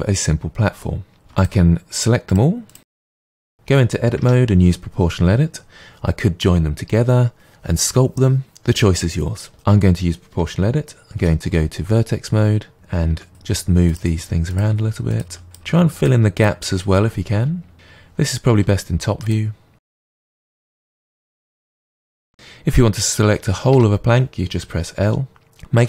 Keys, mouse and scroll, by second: 1.4-2.0 shift+drag, 2.3-4.2 shift+drag, 4.2 Tab, 9.5 click, 11.2 1, 12.7 middle click, 13.1-21.4 typing, 14.1 click, 14.8 click, 15.6 click, 15.9 click, 16.6 click, 17.2 click, 18.2 click, 19.0 click, 20.0 click, 20.5 click, 21.3 click, 21.6 click, 23.7 l, 25.7 a.